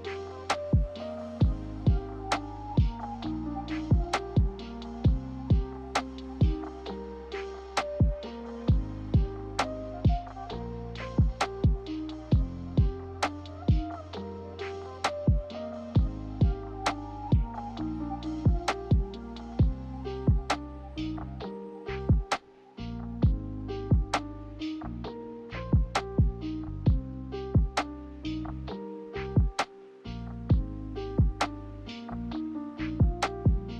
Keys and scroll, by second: 5.3 z, 7.4 ctrl+z, 11.3 n, 14.4 a, 17.4-20.4 typing, 21.7 ctrl+z, 28.6-29.7 typing, 33.2 ctrl+z.